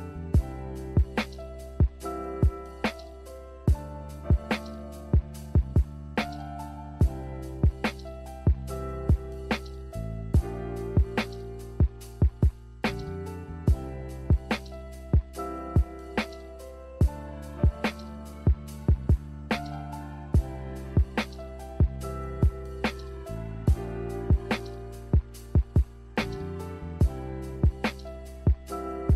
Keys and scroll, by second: 2.6 z, 12.5 n, 24.2-25.3 typing.